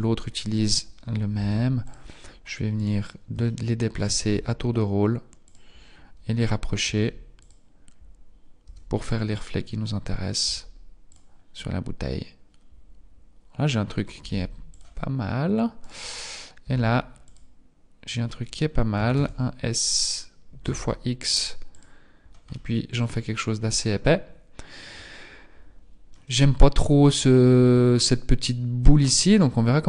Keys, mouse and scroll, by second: 1.4 g, 2.7 right click, 3.3 shift+middle click, 4.2 g, 6.9 g, 8.5 g, 10.5 g, 13.9 g, 15.8 right click, 16.7 g, 18.9 s, 22.5 middle click.